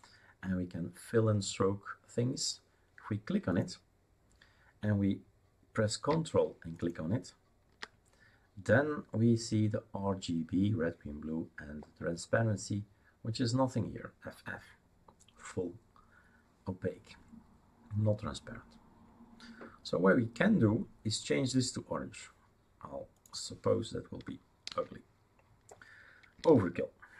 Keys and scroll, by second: 24.7 ctrl+v.